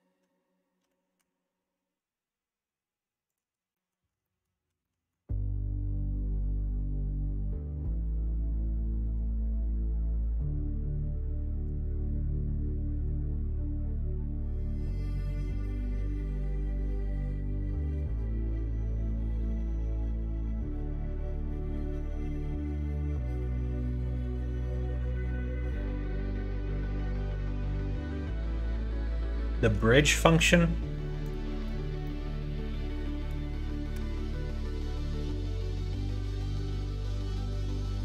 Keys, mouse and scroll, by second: 0.8 g, 3.7 middle click, 4.2 shift+middle click, 4.8 middle click, 6.0-7.5 middle drag, 8.0 middle click, 8.7 shift+middle click, 9.3 scroll up 1, 9.4 middle click, 10.2 scroll down 1, 11.1 middle click, 11.4 scroll down 1, 12.9 2, 13.7 scroll up 1, 13.7 middle click, 25.9 middle click, 26.2 shift+middle click, 26.8 scroll up 1, 26.9 middle click, 27.5 2, 28.5 click, 29.0 click, 29.2 middle click, 31.3 shift+click, 32.0-33.3 middle drag, 33.9 g.